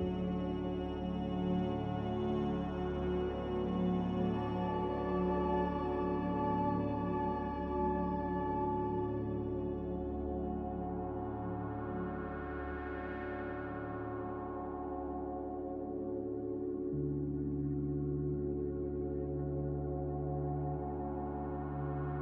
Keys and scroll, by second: 5.5 a, 13.2 z, 17.1 typing, 17.5 Return, 20.5 z.